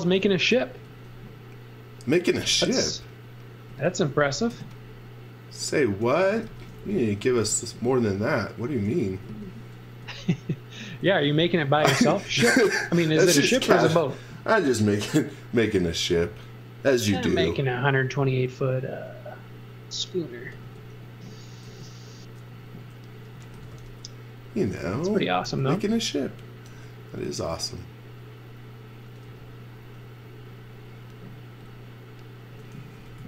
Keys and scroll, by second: 0.0 x, 0.7 space, 1.7 space, 3.7 x, 4.0 v, 4.3 space, 5.9-7.5 typing, 8.8-11.9 typing, 17.4 f, 20.6 space, 21.6 super+z, 23.1-26.7 typing, 29.2 b, 32.5-33.2 typing.